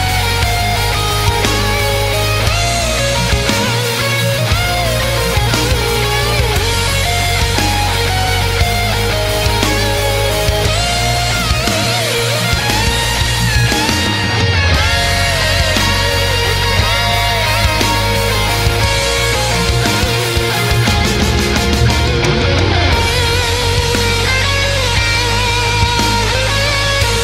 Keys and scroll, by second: 0.7 space, 1.1 space, 4.2 ctrl+z, 4.3 space, 5.3 ctrl+z, 5.8 space, 15.4 space, 16.3 space, 16.4 space, 17.5 space, 18.5 ctrl+z, 20.7 space, 20.8 space, 21.3 space, 21.6 space, 23.3 space, 23.7 space, 24.7 space.